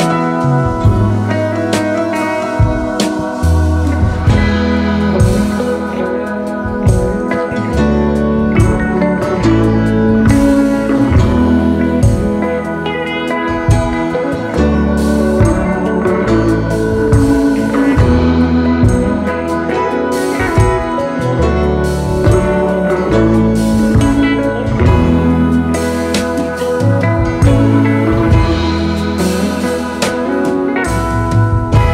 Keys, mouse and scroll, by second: 2.8-3.4 space, 6.3 double click, 7.3 Delete, 7.4 alt+scroll down 4, 7.8 space, 9.7 shift+click, 10.0-10.9 alt+scroll up 3, 10.9 Up, 11.3 Up, 11.5 Up, 11.7 Up, 12.8 alt+scroll down 2, 13.1-13.7 space, 15.2 shift+click, 17.8 typing, 18.3 Return, 19.3-19.7 scroll down 1, 22.3-23.5 scroll down 10, 23.5-25.7 scroll down 4, 27.5 Return, 28.2 Return, 28.6 typing, 30.1 alt+scroll up 1, 30.5-31.2 space, 31.5 space.